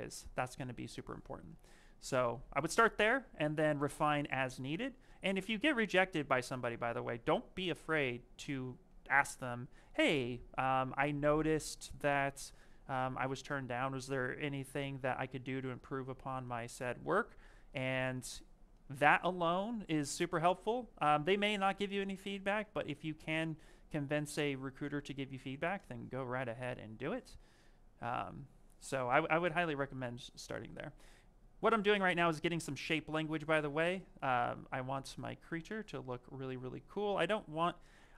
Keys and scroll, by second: 1.7 s, 2.3 s, 7.3 s, 20.8 s, 22.9 s, 26.9 s, 33.3 s.